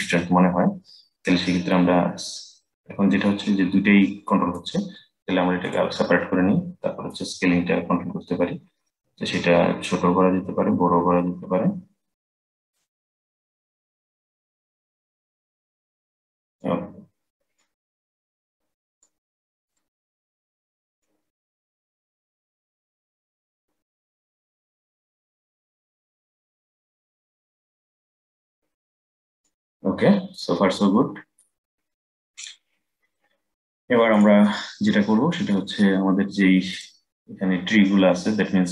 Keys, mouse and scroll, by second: 0.5-1.4 scroll up 3, 1.4-4.5 drag, 5.3-9.9 drag, 13.3-16.4 drag, 17.3-19.5 drag, 20.7-23.7 drag, 30.1 click, 30.5-31.5 middle drag, 31.5-33.8 scroll down 2, 33.8 click, 36.4 click.